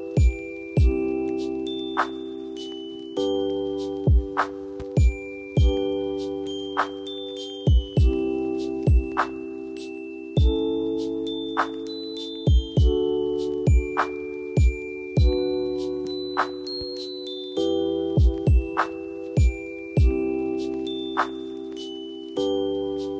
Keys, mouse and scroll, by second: 0.3 click, 7.5 ctrl+click, 11.7 F2, 12.0 click, 17.9 click, 18.2 space, 18.5 click, 19.7 ctrl+z, 21.0 F4, 21.9 F2, 22.2-22.8 drag.